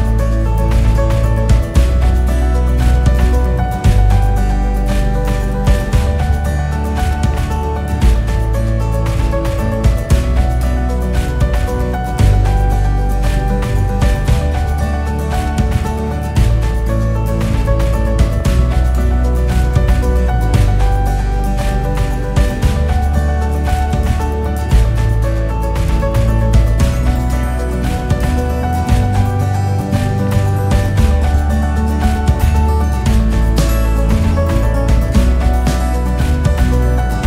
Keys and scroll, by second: 3.7-4.4 typing, 8.4-9.4 typing, 14.1-16.3 typing, 19.5-20.3 typing, 30.5 5, 34.2 typing.